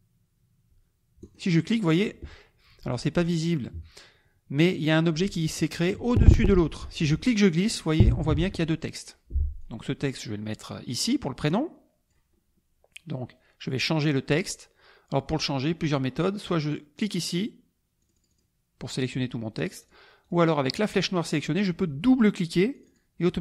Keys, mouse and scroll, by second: 1.2 click, 7.3-9.2 drag, 9.6-12.3 drag, 17.0 click, 18.0 click, 19.8 click, 20.2 click, 20.9 click, 22.7 click.